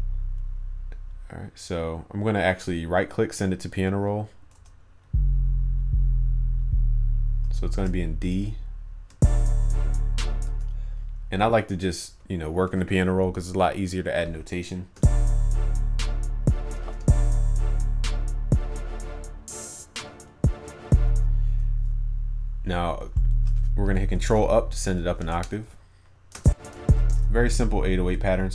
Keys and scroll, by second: 7.8 ctrl+a, 24.3 ctrl+Up.